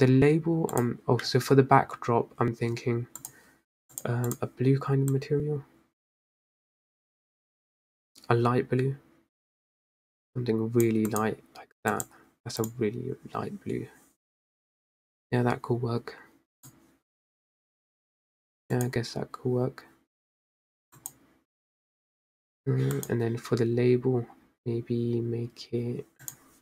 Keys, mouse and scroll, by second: 0.4 scroll up 4, 1.4 click, 3.9-4.8 drag, 11.9 click, 12.5 drag, 13.3 drag, 17.5 click, 19.6 drag, 22.0 click, 23.7 click.